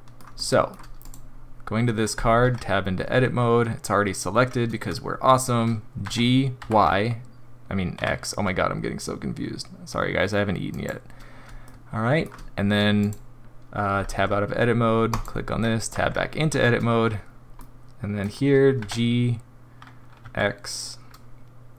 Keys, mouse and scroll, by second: 0.3 shift+middle click, 1.0 click, 2.4 Tab, 6.0 g, 11.6 shift+middle click, 13.0 click, 14.1 Tab, 15.1 click, 15.9 Tab, 17.6 middle click, 18.8 g.